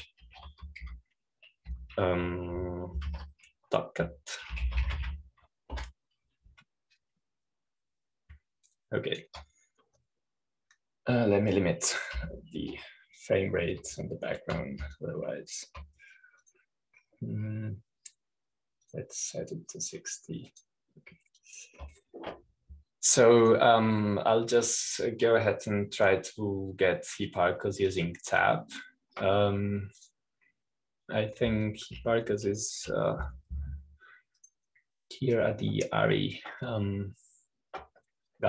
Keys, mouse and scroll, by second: 0.0 click, 2.8 super+t, 3.6 super+t, 5.1 super+z, 6.4-7.7 typing, 7.8 Return, 11.0 click, 14.2 p, 16.2 click, 17.2-19.5 drag, 20.9 click, 22.5-24.2 drag, 25.3 click, 29.8 click, 31.9-32.9 drag, 36.3 click.